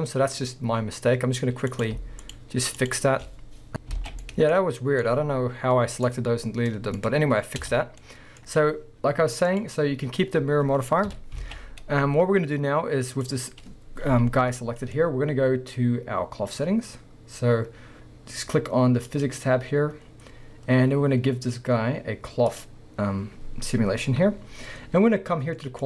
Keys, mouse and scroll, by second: 1.7 click, 2.2 shift+click, 2.8 shift+drag, 3.7 scroll up 1, 4.0 alt+a, 4.2 middle click, 4.5 scroll up 1, 5.0-5.7 middle drag, 6.1 middle click, 6.1-6.6 scroll down 2, 6.6 middle click, 7.6 Tab, 8.0 middle click, 8.6-9.5 scroll down 2, 9.5 click, 10.2-11.1 scroll down 2, 10.3 middle click, 11.1 KP_1, 11.4 alt+a, 11.7 scroll up 1, 13.2 drag, 14.1 g, 15.0 right click, 19.1 click, 22.5-25.8 drag.